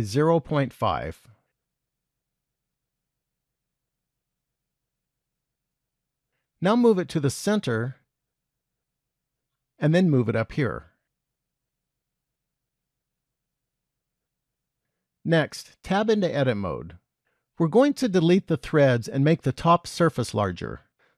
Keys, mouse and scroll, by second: 3.4 shift+middle click, 6.9 g, 10.2 g, 12.8 shift+middle click, 13.7-16.2 scroll up 7, 16.2 Tab, 17.2 middle click.